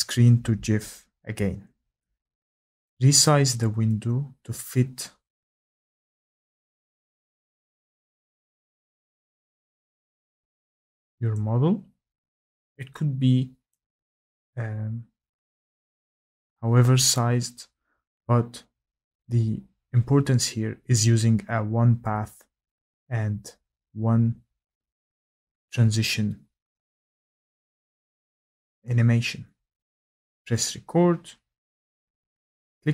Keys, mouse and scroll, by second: 1.7 click, 2.8 click, 5.0 click, 6.4 click, 7.6 scroll, 8.4-9.4 scroll, 10.5 click, 11.3 click, 13.7 click, 15.6 click, 16.0-17.9 scroll, 29.8 middle click, 30.6 click.